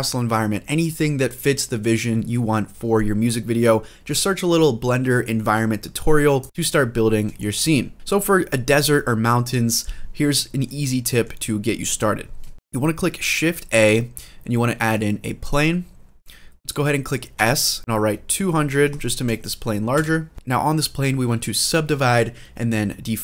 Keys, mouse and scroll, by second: 6.4 shift+middle click, 6.4-6.9 scroll down 2, 7.1 shift+middle click, 7.9 scroll down 1, 10.1-10.4 shift+middle drag, 10.6 middle click, 11.3-12.2 scroll up 2, 12.4 shift+middle drag, 12.5 scroll down 2, 13.4 shift+a, 17.1-18.7 typing, 19.7 Return.